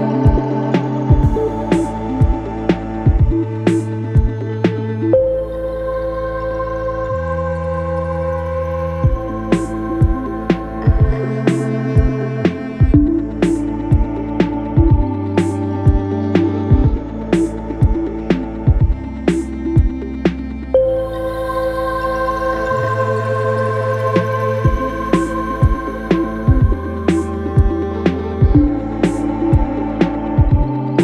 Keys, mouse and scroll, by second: 1.5-3.3 shift+drag, 8.7 click, 17.3 click.